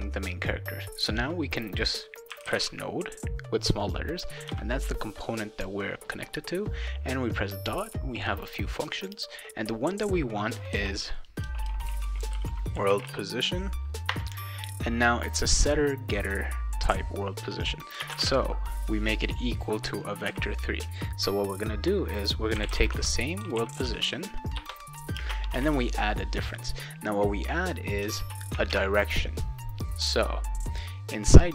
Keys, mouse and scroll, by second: 2.1-3.0 typing, 4.4 ., 10.7-13.6 typing, 14.1 Return, 18.0 space, 18.1 =, 18.2 space, 20.3 ;, 22.3-25.3 typing, 28.2 ctrl+s, 28.7 alt+Tab.